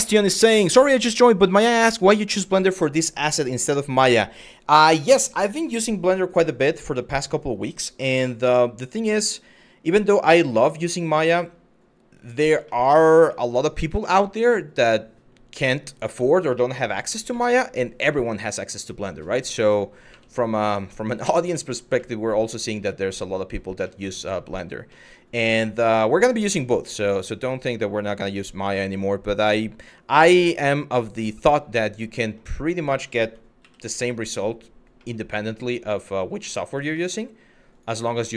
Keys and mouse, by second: 6.7 middle drag, 7.6 z, 8.5 click, 8.9-9.2 middle drag, 9.4 click, 9.8-10.1 middle drag, 10.9 middle click, 11.8 click, 12.3 shift+middle drag, 13.0-13.4 middle drag, 13.7 shift+middle drag, 17.0-18.9 middle drag, 19.7 KP_Divide, 20.6-20.9 middle drag, 21.2 middle drag, 21.6-23.2 middle drag, 23.6-24.1 middle drag, 24.6 middle drag, 26.3-31.1 drag, 31.9 middle click, 33.2 ctrl+a, 34.7-35.1 middle drag, 35.6-36.1 middle drag, 36.7 middle click, 37.3 click, 37.9-38.3 middle drag.